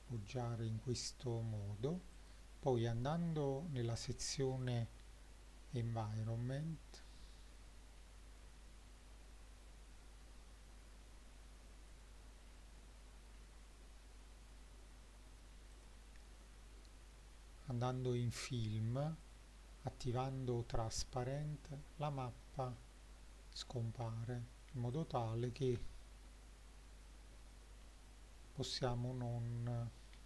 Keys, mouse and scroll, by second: 2.2 click, 7.1-8.0 scroll down 3, 8.0-10.0 scroll down 1, 11.9 click, 12.5 scroll down 2, 13.4-14.4 scroll down 2, 15.7 click, 19.3 click, 22.2 middle drag, 22.7-23.6 scroll up 4, 23.6 middle drag, 24.1-24.6 shift+middle drag, 25.0 click, 25.8 s, 27.5 click, 27.9-28.8 middle drag, 29.2 scroll up 1, 29.6-30.1 middle drag.